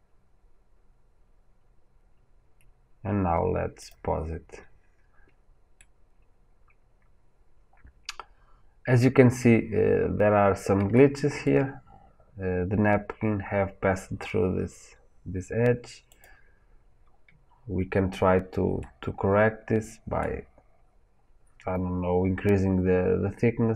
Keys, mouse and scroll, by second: 4.0-5.7 drag, 5.7-16.1 middle drag, 9.7-10.9 scroll up 1, 16.1 click, 18.7-23.7 middle drag.